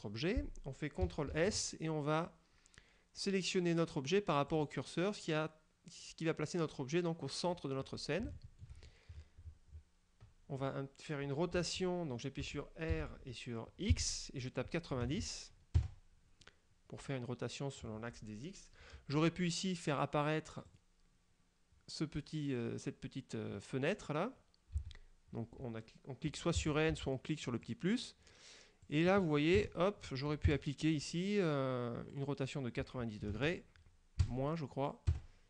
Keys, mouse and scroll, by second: 1.4 shift+s, 4.6 click, 7.6 scroll down 2, 8.4 shift+middle click, 9.2-9.7 shift+scroll down 4, 11.7 r, 12.6 Escape, 13.0 r, 14.0 x, 15.1 KP_9, 15.9 KP_Enter, 16.5-18.0 middle drag, 20.8 click, 24.9 n, 26.7 n, 27.7 click, 29.0 click, 29.7 KP_0, 30.6 KP_Enter, 32.2 click, 33.4 KP_9, 33.4 KP_0, 34.3 KP_Subtract, 35.2 KP_Enter.